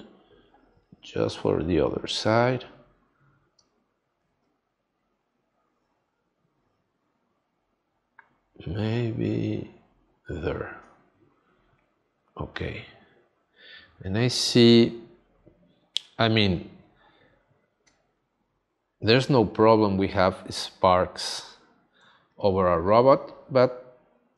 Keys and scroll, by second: 17.8 space.